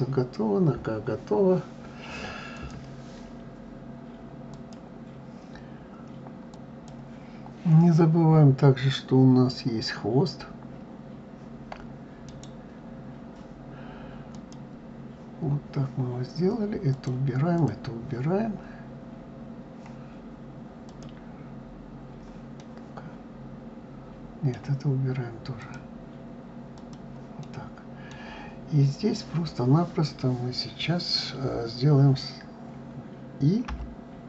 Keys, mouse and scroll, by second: 0.9-2.3 scroll up 2, 2.3 click, 11.9-16.5 right drag, 16.5 click, 17.2 click, 20.5 click, 22.2-25.2 middle drag, 25.2 click, 26.4 click, 27.0-30.0 middle drag.